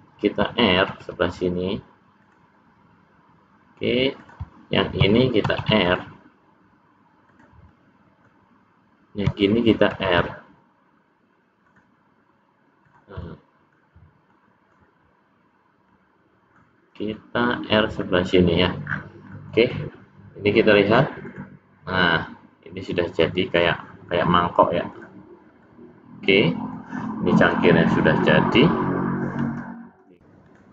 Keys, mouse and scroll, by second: 0.9 ctrl+r, 5.5 ctrl+r, 7.8 middle click, 9.9 ctrl+r, 13.2 middle click, 13.8 scroll up 1, 14.3 middle click, 15.8 scroll down 1, 15.9 middle click, 15.9 scroll up 1, 17.2 middle click, 18.9-20.2 scroll down 6, 19.4 middle click, 20.8 click, 22.0 middle click, 25.0 click, 25.6 middle click.